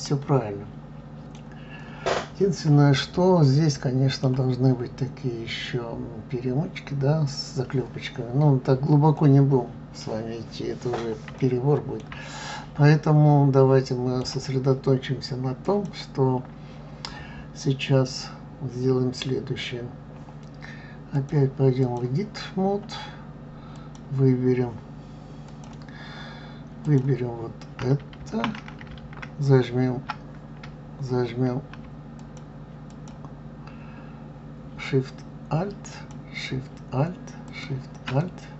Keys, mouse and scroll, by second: 2.4 scroll up 2, 3.1-6.1 middle drag, 8.2 scroll down 2, 9.2-10.7 middle drag, 10.7 scroll up 2, 11.4-12.2 shift+middle drag, 12.2 scroll down 1, 12.9-15.6 middle drag, 15.6 click, 21.1-22.6 drag, 22.6-23.1 scroll up 1, 23.7 click, 25.4 click, 26.8 click, 32.2 alt+shift+click, 32.8 alt+shift+click, 35.9 alt+shift+click, 37.4 alt+shift+click, 38.2-38.5 middle drag.